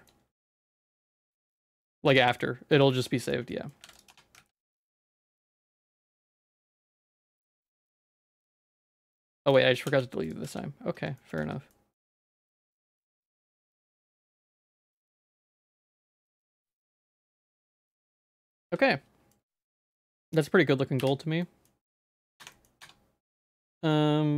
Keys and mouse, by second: 0.0 middle click, 0.5 Tab, 0.7 middle click, 1.3 Tab, 1.7 shift+click, 2.4 middle click, 3.0 ctrl+s, 3.5 middle click, 3.9 ctrl+s, 4.0 click, 4.3 Tab, 4.4 z, 4.7 middle click, 5.1 3, 5.3 z, 5.6 shift+middle click, 6.0 middle click, 6.4-7.6 shift+middle drag, 7.9 shift+middle click, 9.5 alt+shift+click, 9.9 x, 10.5 z, 11.0 Tab, 11.2 middle click, 11.4 z, 11.7 middle click, 12.1 Tab, 12.3 middle click, 12.7 shift+middle click, 13.3 middle click, 13.5 shift+middle click, 13.8 middle click, 14.2 shift+middle click, 14.8 middle click, 15.7 shift+middle click, 16.1 Tab, 16.7 middle click, 17.1 z, 17.6 shift+middle click, 17.9 click, 18.2 shift+click, 18.3 middle click, 18.7 ctrl+s, 18.9 middle click, 19.5 middle click, 21.0 /, 21.4 middle click, 22.2 ctrl+s, 22.2 click, 22.4 Tab, 22.5 middle click, 22.8 Tab, 23.5 Tab, 23.7 a.